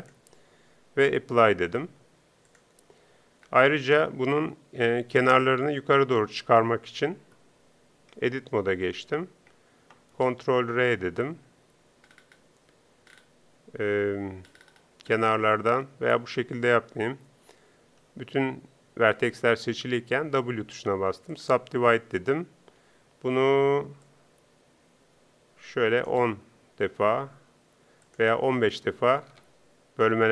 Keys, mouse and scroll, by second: 10.3 ctrl+r, 21.4 w, 22.8 t.